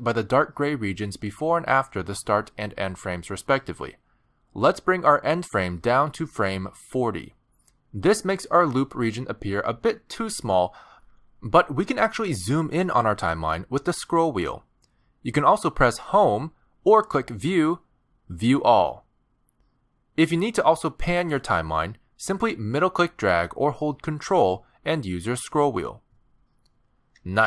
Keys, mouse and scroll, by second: 1.5-4.7 scroll down 3, 6.0 click, 13.6-14.5 scroll up 1, 14.5-16.4 scroll up 7, 16.4-17.2 scroll down 2, 17.4 Home, 19.3 click, 22.0 middle click, 25.2-25.9 ctrl+scroll down 5, 25.9-26.3 ctrl+scroll up 4, 26.4-26.8 scroll down 5, 27.3 scroll down 3.